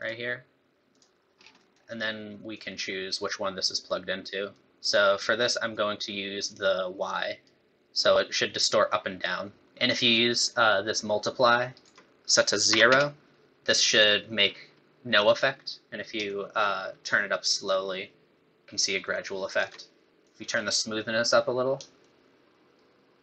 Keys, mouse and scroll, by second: 1.3 scroll down 3, 1.6 middle click, 2.5 click, 4.5 click, 5.7 click, 6.5 click, 8.0 click, 9.6 middle click, 9.6 scroll down 2, 10.5 shift+click, 12.2 click, 16.3 shift+click, 20.2 click, 22.0 shift+click.